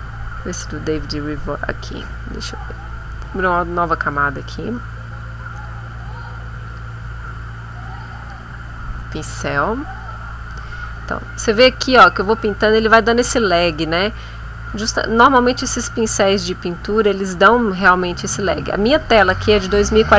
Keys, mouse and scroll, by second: 1.8 click, 3.4 click, 4.0 click, 5.4 click, 6.3 click, 8.2 click, 8.9 shift+click, 9.8-13.6 drag, 15.8-16.8 drag, 17.2-18.4 drag.